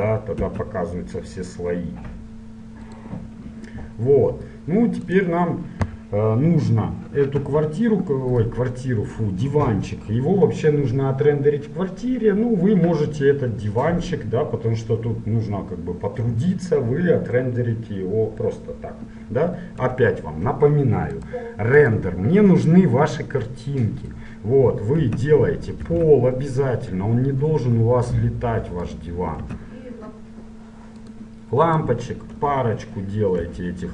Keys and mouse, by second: 0.6 `, 3.0-4.8 drag, 5.3-7.2 right drag, 7.5 Delete, 20.0 KP_1, 20.7 click, 21.3 right click, 22.1-23.3 middle drag, 23.3 click, 25.1 shift+c, 26.0 shift+a, 29.7 s, 31.9-33.7 right drag, 32.5 KP_1, 32.5 KP_4, 33.7 KP_1.